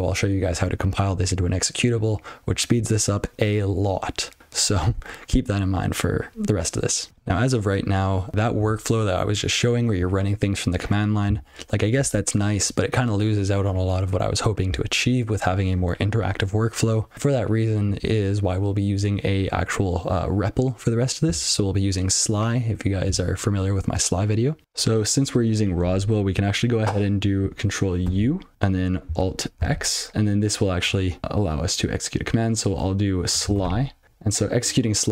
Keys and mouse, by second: 4.4 click.